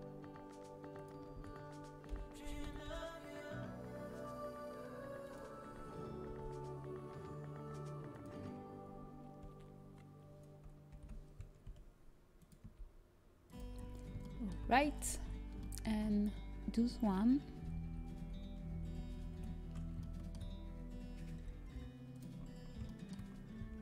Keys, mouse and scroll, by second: 1.3 a, 2.1 l, 3.5 g, 7.4 s, 11.1 shift+l, 12.0 s, 12.6 g, 15.2 a, 18.1 l, 18.8 shift+l, 21.3 shift+l, 21.3 g.